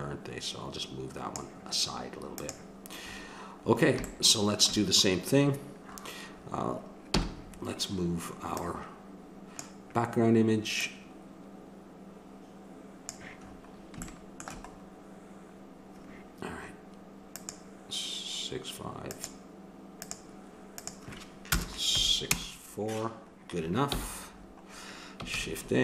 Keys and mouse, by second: 2.3-4.1 drag, 4.1 middle click, 5.8 middle click, 6.3 middle click, 7.1 n, 8.6-10.3 drag, 10.8-13.5 middle drag, 14.0-17.4 middle drag, 17.4-22.2 drag, 23.9 n, 25.3 shift+a.